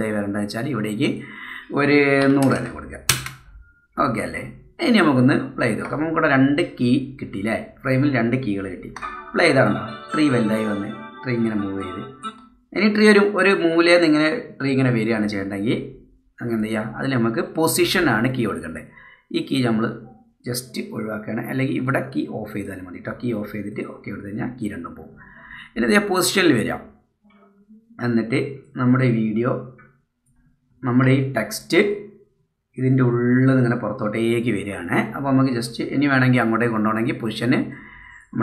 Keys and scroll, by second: 9.0 space, 12.3 space, 31.0 super+z.